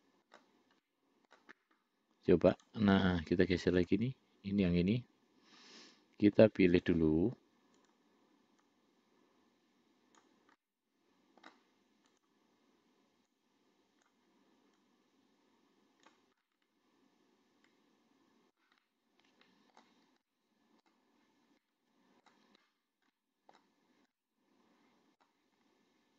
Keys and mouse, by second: 1.1 middle click, 2.8 click, 4.0 click, 7.0 click, 8.0 click, 8.9-10.6 drag, 10.9 middle click, 12.4 click, 13.6 click, 15.1-16.5 drag, 16.7-18.9 middle drag, 19.1-20.1 middle drag, 20.6 middle click, 21.9 middle click, 23.4 middle click, 24.5-25.5 middle drag.